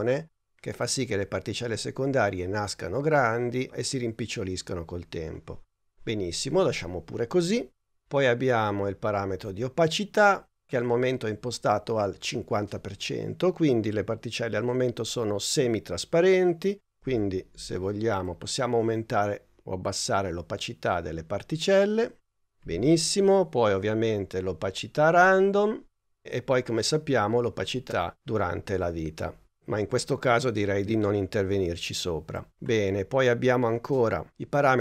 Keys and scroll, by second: 22.7 super+z.